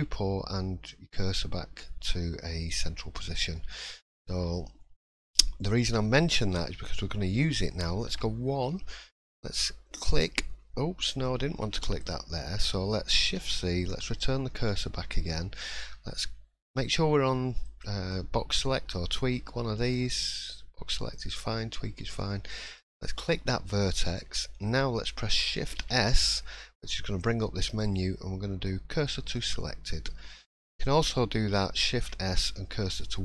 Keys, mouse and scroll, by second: 2.7 click, 3.5 shift+middle click, 3.8-4.4 scroll up 6, 4.5 shift+middle click, 5.1-5.8 shift+scroll up 3, 5.9 middle click, 6.5 shift+middle click, 7.0 middle click, 8.1 1, 9.5 click, 12.0 click, 13.4 shift+c, 14.0-14.4 scroll up 8, 14.7 shift+middle click, 15.6-16.5 shift+scroll up 1, 17.6 click, 18.1 click, 25.6 shift+s, 29.9 middle click, 31.9 shift+s.